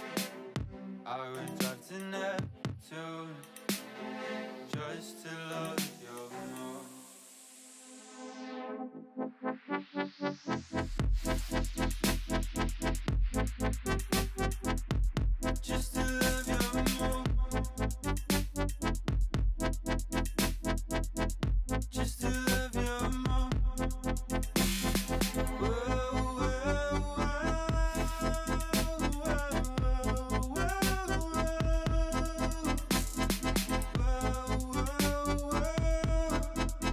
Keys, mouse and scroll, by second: 2.5 scroll down 3, 2.8 click, 3.0 middle click, 3.2-3.8 scroll up 2, 3.8 3, 3.9 click, 4.2 shift+click, 4.5 shift+click, 4.9 shift+click, 5.2 shift+click, 5.5 shift+click, 5.8 middle click, 6.5-7.1 scroll up 7, 7.1 shift+click, 7.5 shift+click, 7.7 shift+click, 7.9 shift+middle click, 8.4 shift+click, 8.7 shift+click, 8.9 shift+click, 9.2 middle click, 9.7-10.5 scroll down 7, 10.5 middle click, 10.8 x, 11.6 shift+middle click, 11.8-12.3 scroll up 2, 12.3 shift+middle click, 12.6-13.1 scroll up 1, 13.1 middle click, 13.5 2, 13.8 click, 14.1 shift+click, 14.6 f, 15.1 alt+click, 15.5 f, 15.9 ctrl+z, 16.3 click, 17.1 f, 17.8 middle click, 18.5 click, 18.8 shift+click, 19.0 f, 19.3 click, 19.5 shift+click, 19.8 f, 20.1 click, 20.4 shift+click, 20.6 f, 20.9 click, 21.1 shift+click, 21.4 f, 21.8-22.5 shift+middle drag, 22.5 click, 22.9 click, 23.2 shift+click, 23.5 f, 23.8 click, 24.1 shift+click, 24.4 f, 24.6 click, 24.9 shift+click, 25.2 f, 25.5 middle click, 26.0 click, 26.3 shift+click, 26.5 f, 26.7-28.5 shift+middle drag, 28.5 click, 28.8 shift+click, 29.0 f, 29.2 click, 29.5 shift+click, 29.8 f, 30.2 middle click, 30.5 scroll down 3, 30.7 shift+middle click, 31.0-31.3 scroll up 3, 31.3 middle click, 31.6 click, 32.1 shift+click, 32.7-36.1 typing, 33.0 click, 33.3 shift+click, 33.7 shift+click, 34.3 click, 34.5 shift+click, 34.9 click, 35.2 shift+click, 35.6 click, 35.8 shift+click, 36.3 middle click.